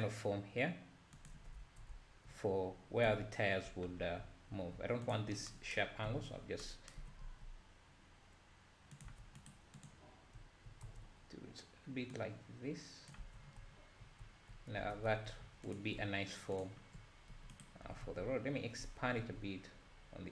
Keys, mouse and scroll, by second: 1.6 Tab, 1.9 `, 3.1 Tab, 3.7 `, 4.0 scroll up 1, 4.2 `, 6.1 o, 7.0 g, 9.1 Tab, 9.4-10.3 right drag, 10.3 `, 10.9 Tab, 12.3 click, 13.2 Tab, 13.5 scroll down 3, 13.6 `, 14.2 `, 14.8 Tab, 15.1 `, 15.8 alt+click, 16.6 alt+shift+click, 17.3 e, 17.8 s.